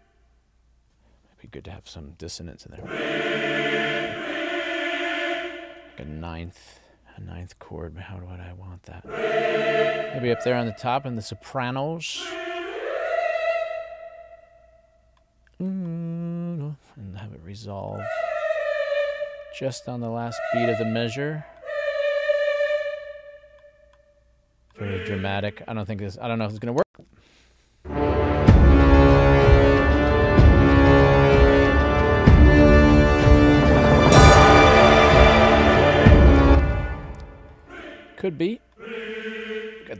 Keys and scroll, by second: 26.9 space, 36.4 space.